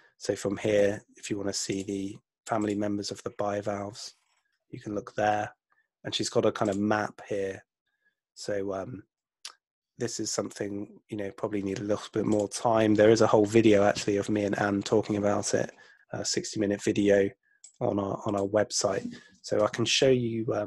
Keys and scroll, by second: 19.7 super+Tab.